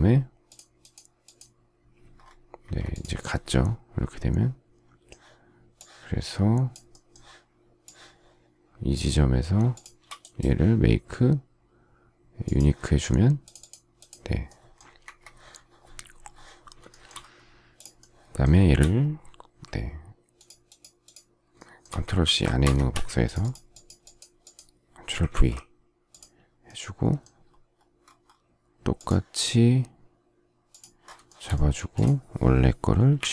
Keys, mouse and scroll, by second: 2.5 Escape, 9.7 shift+click, 15.0 Escape, 16.8 shift+middle click, 22.2 ctrl+c, 22.6 Escape, 25.3 ctrl+v, 31.2 shift+middle click, 31.7 space, 33.1 Delete.